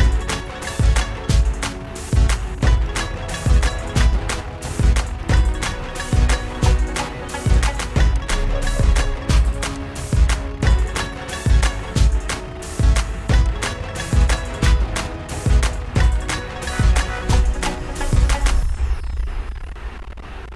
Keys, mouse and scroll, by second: 1.5 click, 3.0 click, 3.1 alt+click, 6.1 alt+click, 6.9 alt+click, 8.6 click, 11.7 click, 18.3 click.